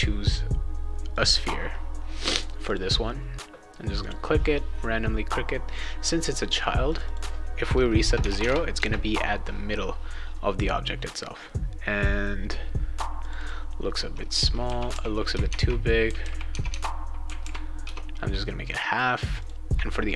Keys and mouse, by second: 1.1 click, 2.7 click, 4.0 click, 6.9 click, 7.0 click, 8.2 Tab, 8.4 Tab, 13.2 click, 13.3 click, 15.5 shift+Tab, 16.5 Tab, 16.7 Tab, 19.3 click.